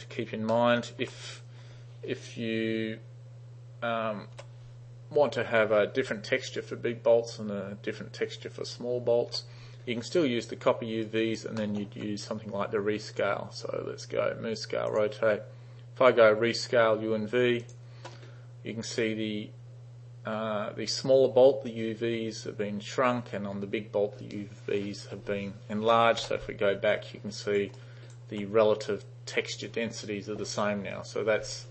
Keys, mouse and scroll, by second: 0.5-0.9 alt+middle drag, 4.4 alt+u, 6.1 u, 9.4 u, 11.1 alt+right click, 11.7 alt+middle drag, 13.2 click, 15.0 click, 17.7 click, 26.3 3, 27.0-27.7 alt+drag, 27.8 alt+right click.